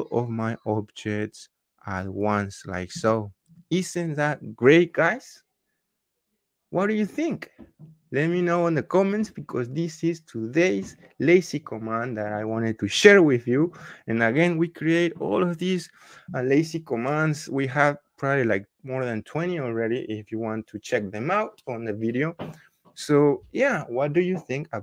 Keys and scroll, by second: 2.8 Return.